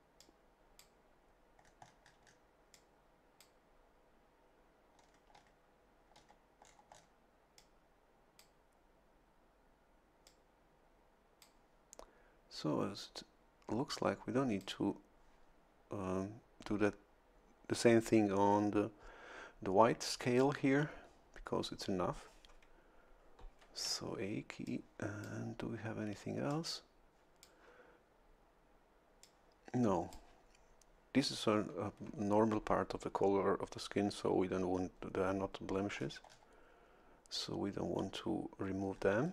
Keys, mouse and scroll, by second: 0.2 click, 1.6-2.5 scroll up 1, 2.7 click, 4.9-5.6 scroll down 2, 6.1-7.2 scroll down 4, 7.6-8.6 drag, 10.2-11.9 drag, 13.9-15.1 drag, 23.8 a, 24.7 click, 26.5-27.8 drag, 29.2-30.6 drag, 35.8 a, 35.9 scroll down 1, 38.9-39.3 scroll up 2.